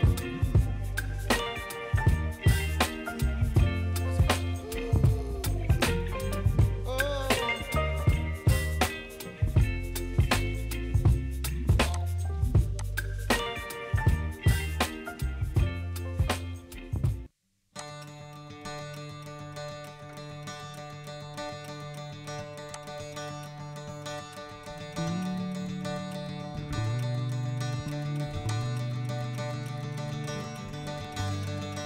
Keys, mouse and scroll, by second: 0.5-1.2 scroll up 4, 1.2-4.2 middle drag, 5.0-5.5 scroll down 1, 5.5 click, 5.8-6.3 scroll down 1, 6.3-7.5 middle drag, 7.5-8.7 scroll up 12, 8.7-11.8 middle drag, 11.8 click, 12.7 click, 17.7 click, 18.7-19.4 scroll down 2, 22.7 click, 28.4 click.